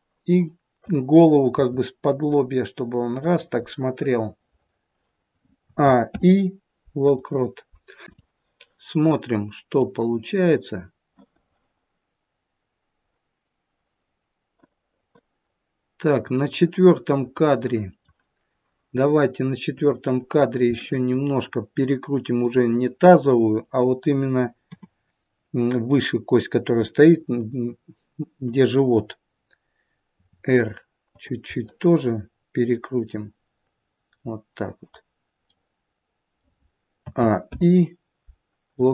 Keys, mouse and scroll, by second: 0.8 click, 1.5 r, 3.7 middle click, 5.6 a, 6.0 i, 8.0 click, 9.8 click, 17.3 middle click, 19.8 click, 20.7 middle click, 22.4 click, 24.6 KP_7, 30.2 r, 31.5 middle click, 35.4 middle click, 37.0 a, 37.4 i.